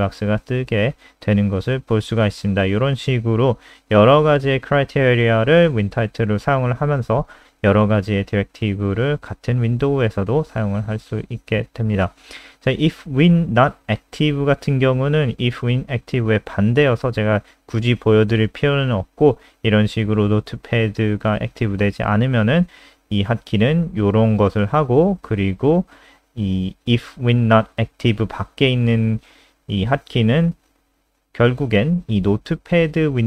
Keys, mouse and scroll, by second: 0.4 click, 4.2-5.5 scroll down 5, 5.7 click, 6.5 ctrl+c, 6.6 click, 8.5 ctrl+v, 8.7 ctrl+s, 8.9 click, 10.1 click, 12.3 click.